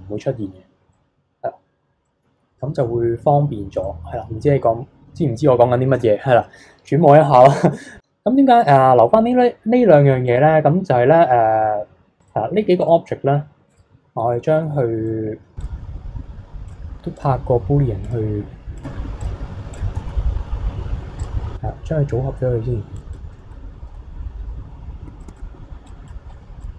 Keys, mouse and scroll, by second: 0.9-1.6 middle drag, 1.6-2.0 scroll down 2, 2.0 middle click, 2.4 scroll up 2, 2.7 KP_3, 3.2-3.8 scroll down 1, 3.8-7.0 middle drag, 8.0-8.6 middle drag, 8.6 click, 10.2 click, 12.2 click, 12.8 click, 13.7 click, 14.6-15.1 scroll up 1, 15.1-15.6 middle drag, 15.6 click, 16.7-19.2 drag, 21.2 click, 23.1 click, 23.3-24.6 middle drag, 25.3 click, 25.8 click, 26.2-26.6 scroll down 16, 26.6-26.7 drag.